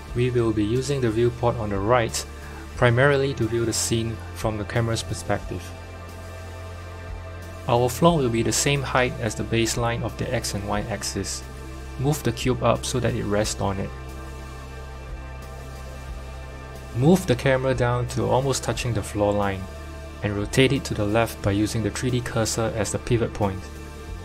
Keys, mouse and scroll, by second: 1.3 KP_0, 2.9-4.4 scroll up 3, 4.4 click, 6.5 click, 7.3 KP_1, 9.1 g, 11.7 click, 12.8 g, 16.8 click, 17.6 KP_7, 18.9 click, 20.8-22.0 drag, 22.0-22.6 scroll down 1, 22.6 scroll down 2, 22.6 r.